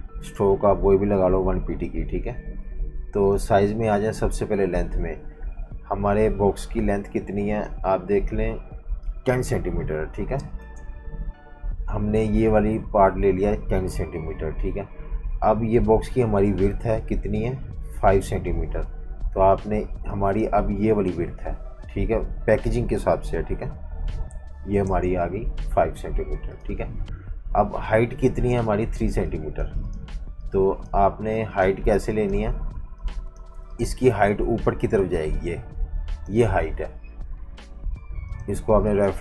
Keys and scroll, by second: 6.7 F19, 9.9-10.8 typing, 24.6 5, 24.8 Return, 29.1 space, 29.6 space, 31.9 v, 32.0 space.